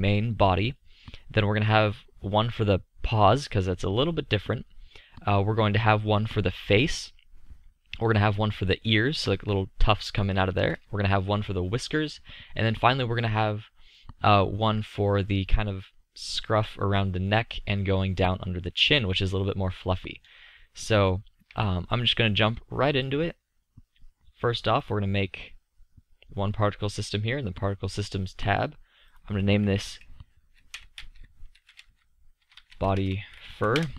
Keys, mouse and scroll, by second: 12.8-15.5 middle drag, 19.3-19.6 middle drag, 24.8-26.7 drag, 26.7-29.1 middle drag, 29.1-31.1 drag, 31.1-33.9 middle drag.